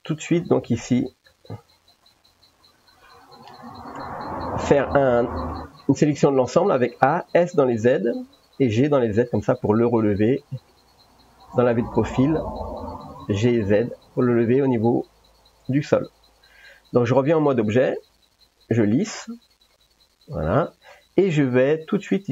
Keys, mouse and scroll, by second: 0.0 middle click, 0.0 1, 1.9 click, 4.0 ctrl+n, 5.1 a, 5.5 middle click, 7.4 s, 8.6 g, 9.7 middle click, 13.4 g, 16.1 middle click, 17.6 middle click, 18.0 Tab, 19.7-20.8 middle drag.